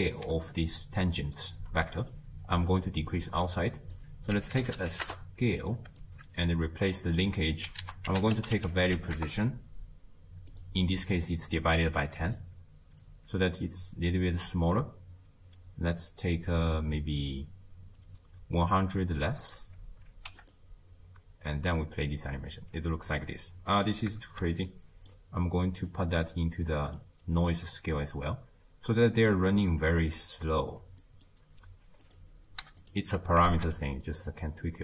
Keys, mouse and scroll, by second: 0.5-2.0 ctrl+middle drag, 2.0-2.5 drag, 2.5-3.5 scroll up 1, 3.5-5.0 drag, 6.0 alt+click, 7.3 middle click, 7.8 ctrl+a, 11.7 drag, 18.6-20.5 drag, 21.5 space, 22.7 space, 23.1 scroll down 4, 24.2 shift+space, 24.7-25.9 middle drag, 25.9 click, 27.7 space, 29.8 space, 31.0-32.0 middle drag, 32.0 click, 33.5 shift+space.